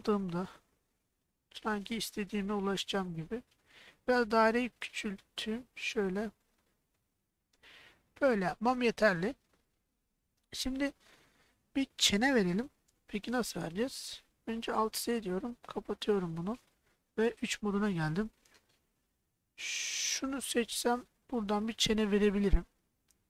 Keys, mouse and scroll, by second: 0.5 KP_3, 2.0 g, 8.2 click, 9.2-10.8 middle drag, 14.7 alt+z, 15.2 middle click, 17.3 3, 19.9 click, 21.2 middle click.